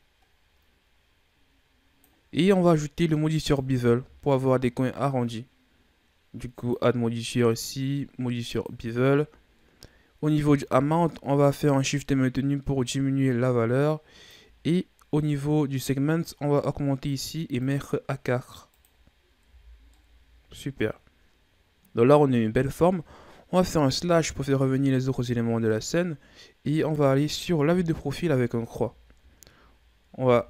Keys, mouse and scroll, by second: 3.4-9.5 drag, 10.6-13.6 drag, 17.1-19.4 drag, 19.4 a, 19.7 scroll down 2, 19.9-22.9 middle drag, 23.9 KP_Divide, 26.8 right click, 27.7 KP_3, 28.9-30.2 shift+scroll up 4, 30.2 Tab.